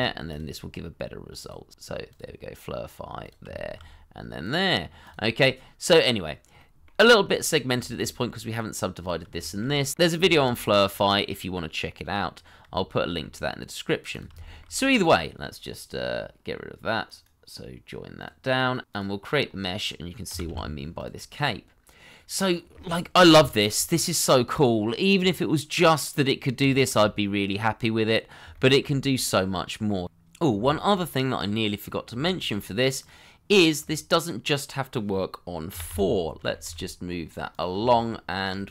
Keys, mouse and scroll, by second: 3.5 shift+middle click, 4.8-5.1 scroll down 1, 5.3 middle click, 7.1-7.7 scroll up 1, 7.8 shift+middle click, 9.4 shift+middle click, 9.8 scroll down 1, 10.1 middle click, 11.2 shift+middle click, 12.8-13.2 scroll down 1, 13.3 shift+middle click, 14.5 shift+middle click, 17.0 right click, 18.5 double click, 20.3 g, 20.4 y, 21.3 middle click, 26.3 scroll down 1, 26.6 shift+middle click, 27.0 middle click, 28.7 shift+middle click, 30.6 shift+middle click, 31.5 middle click, 32.1 shift+middle click, 32.4-33.8 scroll up 1, 33.8 middle click, 35.7 g, 35.8 y, 36.6 x, 37.9 shift+middle click, 38.6 s.